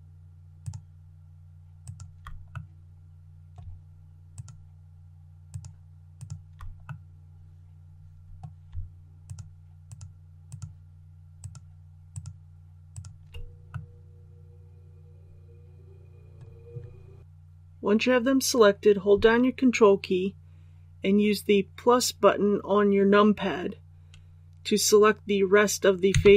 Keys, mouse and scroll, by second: 0.6 shift+right click, 1.8 shift+right click, 2.5 middle click, 4.3 shift+right click, 5.4 shift+right click, 6.1 shift+right click, 6.8-8.6 middle drag, 9.2 shift+right click, 10.4 shift+right click, 11.3 shift+right click, 12.1 shift+right click, 12.9 shift+right click, 13.7-16.6 middle drag.